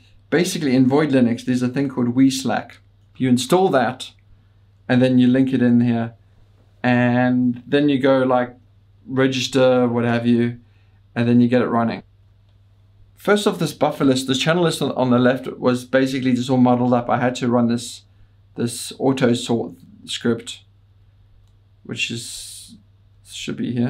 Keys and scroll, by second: 7.3 Return, 7.3 typing, 11.9 ctrl+d, 17.8 Up, 18.5-19.9 Up, 20.9 Down, 21.2 Down, 21.4 Down, 22.3 Down, 22.6 Page_Down, 23.0 Page_Up, 23.3-23.8 Down.